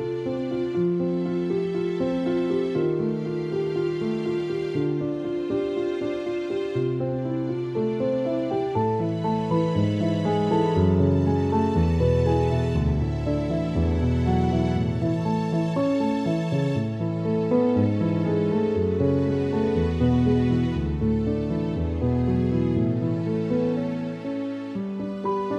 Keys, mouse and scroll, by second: 0.2 alt+click, 3.6 alt+click, 3.8 alt+click, 5.1 alt+click, 7.2 space, 7.3 click, 7.5 space, 8.7 alt+click, 9.6 space, 9.8 click, 9.9 space, 11.1 alt+click, 11.7 space, 11.8 click, 12.0 space, 12.8 alt+click, 14.2 space, 14.3 click, 14.5 space, 15.2 space, 15.7 ctrl+=, 16.3 typing, 17.2 alt+click, 19.2 alt+click, 20.4 alt+click, 22.2 alt+click, 23.4 alt+click, 24.2 alt+click.